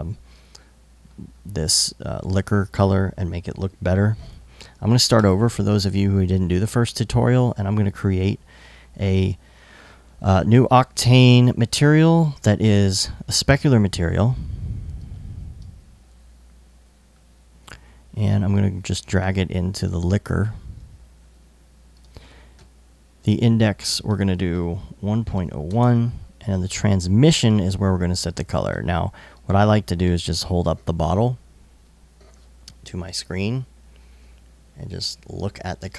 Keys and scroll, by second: 4.8 BackSpace, 24.4-25.6 typing.